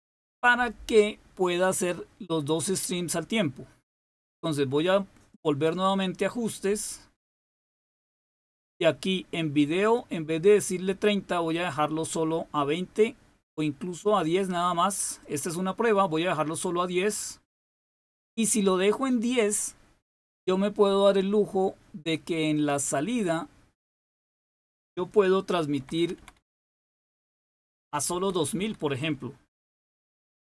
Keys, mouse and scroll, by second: 3.7 click, 5.2 click, 8.5 click, 9.8 click, 15.2 click, 22.5 click, 24.2 click, 25.7 Left, 25.9 Left, 26.1 Left, 26.3 Left, 26.5 Left, 26.7 Left, 28.1 Right, 28.5 Delete, 29.8 0.